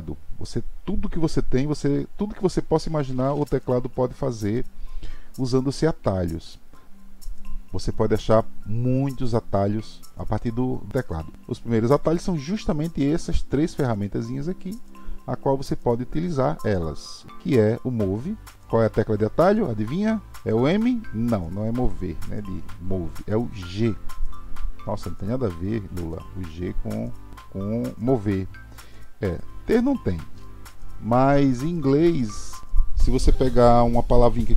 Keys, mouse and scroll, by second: 24.9 g.